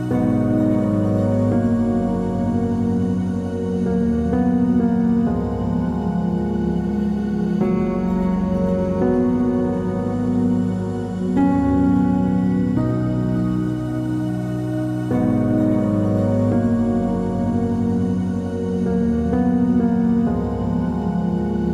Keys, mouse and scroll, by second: 0.0-1.0 typing, 2.0 click, 6.4 click, 13.1 KP_0, 13.3 Tab, 13.6 KP_0, 13.9 Tab, 14.0 KP_0, 14.2 Tab, 14.5 KP_0, 14.9 KP_Enter, 16.5 right click, 18.2 click.